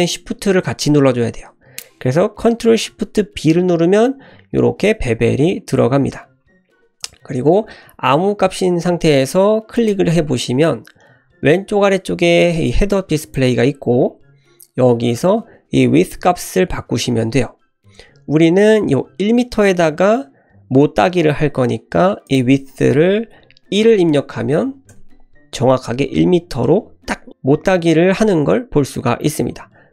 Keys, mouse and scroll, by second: 3.4 ctrl+shift+b, 6.4 s, 13.1 click, 22.2-25.4 drag, 28.9 shift+middle click.